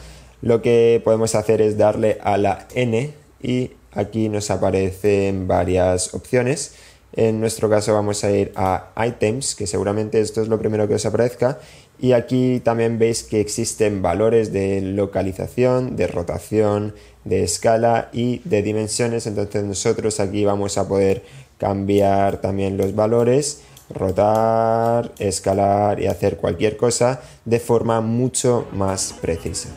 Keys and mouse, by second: 3.2 n, 8.8 click, 10.4-11.4 drag, 11.8 click, 12.6 click, 14.0 click, 14.8 click, 15.9-16.9 drag, 20.5 click, 21.8 click, 22.7 click, 24.0 click, 24.8 click, 25.9-27.0 drag.